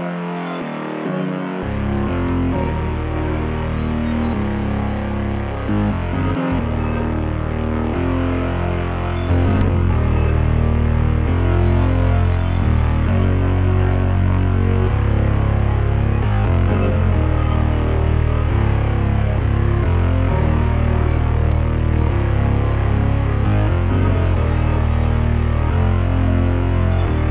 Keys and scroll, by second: 2.2 ctrl+l.